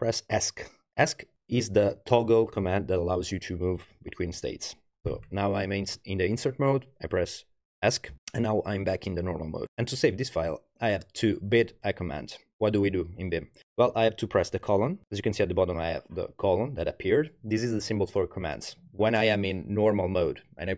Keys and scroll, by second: 8.1 Escape.